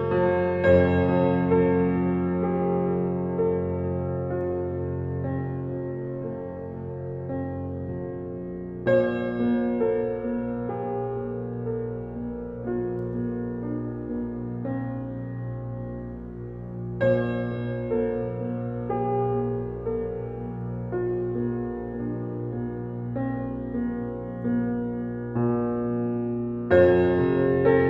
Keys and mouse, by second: 0.1 click, 1.8-3.8 drag, 4.5 click, 5.1 click, 5.9-7.8 drag, 9.0 click, 10.0 click, 10.8 click, 11.3 -, 11.5 -, 11.6 -, 13.1 click, 13.8 click, 15.1 click, 16.1 click, 16.7-21.8 drag, 22.4 Page_Up, 22.5 Page_Up, 22.9 Page_Up, 23.0 Page_Up, 23.2 Page_Up, 23.4 Page_Up, 24.5 click, 25.1 space, 26.1-27.8 drag.